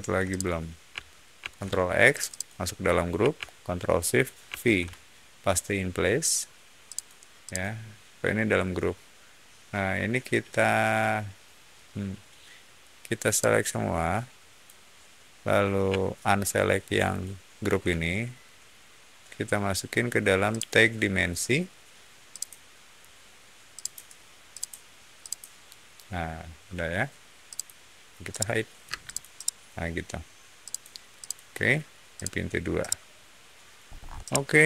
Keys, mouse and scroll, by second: 0.2 shift+click, 1.3 ctrl+x, 2.0 click, 2.2 click, 4.4 ctrl+shift+v, 6.8 click, 7.4 click, 13.2-14.5 drag, 16.9 ctrl+shift+click, 20.4 ctrl+shift+click, 22.2 ctrl+shift+click, 23.7 ctrl+shift+click, 24.4 ctrl+shift+click, 25.1 ctrl+shift+click, 27.4 ctrl+shift+click, 28.2 ctrl+shift+middle click, 28.8 space, 29.0 click, 29.3 middle click, 30.6 click, 31.1 click, 32.1 click, 32.7-33.6 middle drag, 33.8 scroll up 1, 34.1-34.6 shift+middle drag.